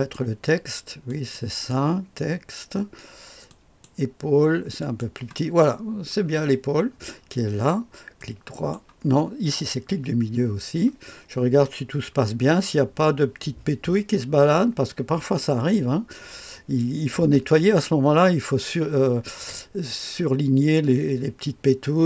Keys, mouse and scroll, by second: 17.8-20.9 middle drag, 20.9-22.0 drag.